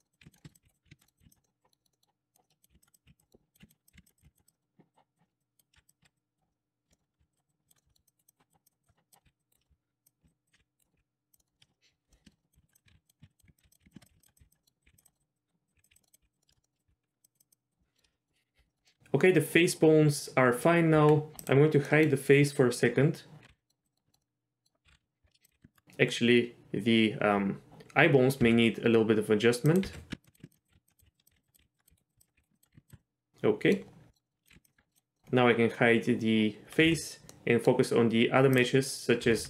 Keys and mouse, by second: 0.0-1.2 typing, 0.0 middle click, 0.4 shift+middle click, 0.5 click, 1.0 middle click, 1.7 middle click, 1.8 middle click, 1.9 middle click, 2.3 click, 2.4 middle click, 2.7-4.2 typing, 2.9 click, 3.2 middle click, 4.2 click, 4.4 click, 4.5 middle click, 5.2 middle click, 5.4 click, 5.7 z, 6.0 z, 6.2 click, 6.5 middle click, 7.2 z, 7.3 click, 7.8 middle click, 7.9 middle click, 8.1 shift+click, 8.3 shift+click, 8.6 shift+click, 8.8 shift+click, 8.9 middle click, 9.2 z, 9.4 click, 9.6 middle click, 9.7 g, 10.2 ctrl+click, 10.5 ctrl+click, 10.5 g, 10.8 middle click, 10.9 g, 11.4 middle click, 11.5 shift+middle click, 12.1 middle click, 12.2 shift+middle click, 12.4 middle click, 12.5-16.9 typing, 12.7 click, 12.9 ctrl+z, 13.0 click, 13.2 ctrl+z, 13.3 click, 13.7 click, 13.9 shift+middle click, 14.6 middle click, 14.8 click, 15.1 middle click, 15.2 click, 15.3 click, 16.0 middle click, 16.1 click, 16.4 middle click, 16.5 shift+middle click, 16.6 middle click, 16.8 click, 17.2 click, 17.5 click, 17.8 middle click, 18.1 middle click, 18.7 middle click, 18.8 middle click, 20.9 Tab, 21.4 click, 21.9 middle click, 23.5 h, 23.5 middle drag, 23.9 middle drag, 24.1 shift+middle click, 24.2-24.6 middle drag, 24.8 ctrl+z, 25.0 ctrl+z, 25.2 Tab, 25.4 click, 25.5 g, 28.4 z, 29.7 click, 29.8-32.9 typing, 30.6 click, 31.2 click, 32.1 click, 32.5 ctrl+click, 33.0 middle click, 34.1 middle click, 34.2 middle click, 34.5 g, 34.7 middle click, 34.8 Tab, 34.9 middle click, 35.1 middle click, 36.8 h, 37.3-37.6 middle drag, 39.2 r, 39.3 r.